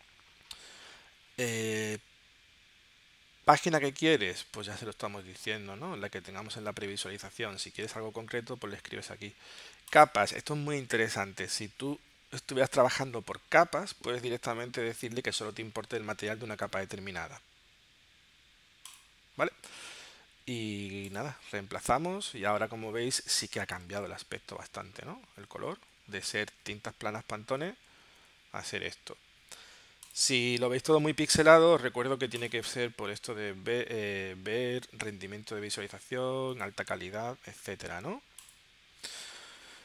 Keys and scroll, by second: 24.0 super+z, 24.8 shift+super+z, 25.8 super+z, 27.9 shift+super+z.